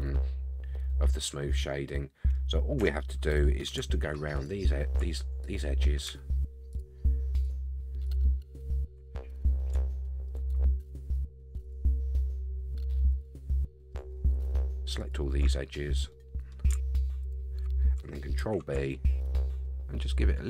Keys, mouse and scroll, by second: 2.8 Tab, 4.3 click, 5.4 alt+click, 6.7 alt+shift+click, 7.4 alt+shift+click, 8.1 alt+click, 8.7 alt+shift+click, 9.0 scroll down 1, 9.0 middle click, 9.9 shift+middle click, 11.0 alt+shift+click, 11.6 alt+shift+click, 12.1 alt+shift+click, 13.1 alt+shift+click, 13.4 middle click, 14.3 alt+shift+click, 15.0 alt+shift+click, 15.4 shift+middle click, 16.1 middle click, 17.2 alt+shift+click, 18.4 ctrl+b.